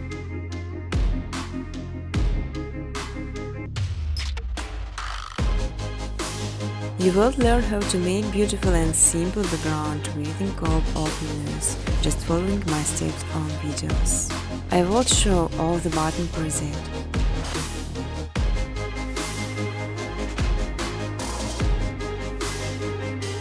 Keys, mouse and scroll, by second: 0.0-1.3 typing, 1.6 Return, 5.6 click, 6.0-7.4 typing, 9.8 click, 10.0 click, 12.0 click, 13.9-15.0 typing, 16.1 Tab, 16.8-18.0 typing, 19.8 click, 20.0-21.1 typing, 22.1 Tab, 22.4 typing, 23.0 click.